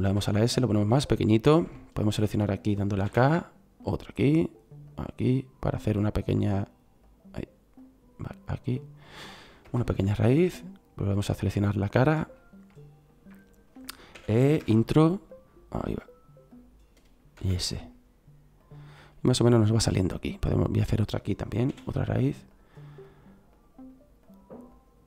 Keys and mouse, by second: 0.0 s, 1.3 middle click, 3.0 k, 14.1 e, 17.3 s, 21.6 k.